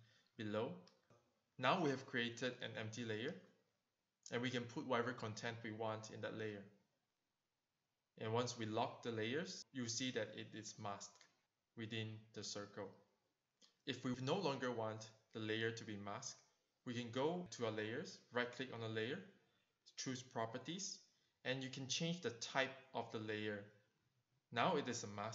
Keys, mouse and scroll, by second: 0.1 click, 0.6 click, 1.6 click, 2.2 v, 2.3 click, 2.6 BackSpace, 2.7 click, 3.0 click, 3.6 click, 3.8 v, 3.9 click, 4.2 click, 4.8 q, 5.6 click, 5.9 click, 6.3 click, 6.5 q, 6.6 click, 6.9 click, 7.7 click, 8.5 click, 11.6 click, 18.1 right click, 21.2 click.